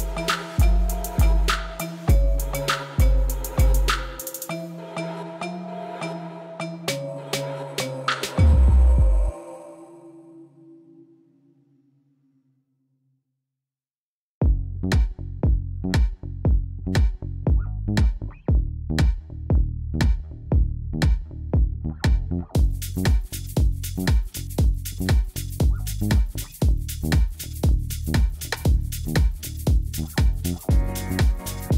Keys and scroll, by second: 13.5 b, 14.8 shift+z, 15.8 shift+z, 17.0 r, 17.4 z, 17.7 g, 19.6 alt+a, 21.8 shift+a, 22.8 Tab, 23.1 s, 24.8 s, 26.2 3, 26.7 z, 28.3 s, 29.0 ctrl+r, 29.2 7, 29.4 Return.